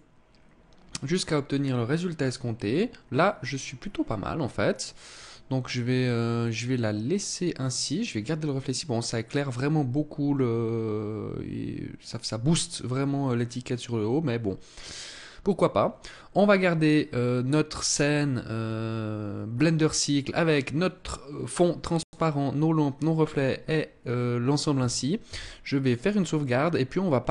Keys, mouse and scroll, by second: 24.6 ctrl+s.